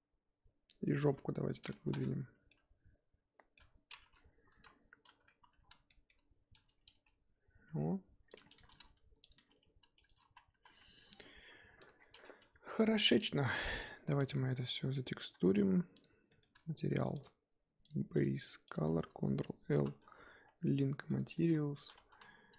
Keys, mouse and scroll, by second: 1.0 g, 1.8 z, 2.1-2.5 scroll down 4, 2.5-3.6 middle drag, 3.6-4.1 scroll up 2, 4.1-4.5 scroll down 2, 4.5 KP_1, 5.4 Tab, 5.9-6.9 shift+middle drag, 6.9 g, 8.5 r, 9.3 g, 10.2 ctrl+z, 10.5 ctrl+z, 11.8 click, 11.9-12.4 scroll down 6, 12.4 g, 12.9 scroll up 4, 13.1 click, 13.5 z, 14.2 click, 15.9 shift+click, 16.3 shift+middle click, 17.1 click, 17.8 click, 18.1-19.7 drag, 19.7 ctrl+l, 21.7 Tab, 22.0 a.